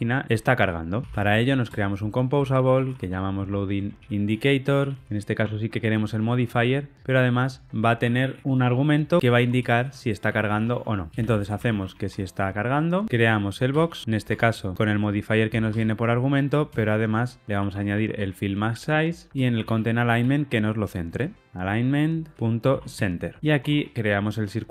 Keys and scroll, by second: 1.7 Return, 14.2 Tab, 15.6 Escape, 18.8 Return, 20.1 Return, 22.3 Return.